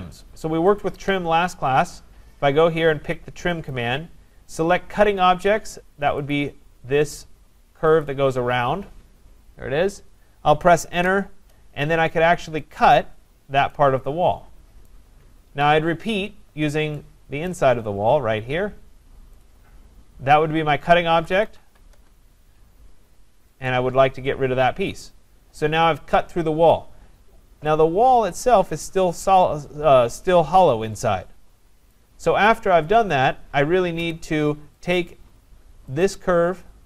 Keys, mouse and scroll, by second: 0.8 click, 3.7 click, 6.3 click, 8.1 click, 10.9 Return, 12.8 click, 14.9 right click, 15.6 Escape, 17.5 right click, 17.7 scroll, 18.2 scroll down 4, 19.4 click, 20.7-21.2 scroll, 21.0-22.1 typing, 21.5 middle click, 23.7 click, 25.0 click, 25.0 typing, 25.8 Return, 26.1-27.0 typing, 26.2 Return, 26.7 right click, 26.9 Return, 27.1 scroll, 28.9 middle click, 29.8 middle click, 30.2 middle click, 31.9 right click, 33.1 click, 34.0 Return, 34.9 click, 36.1 click.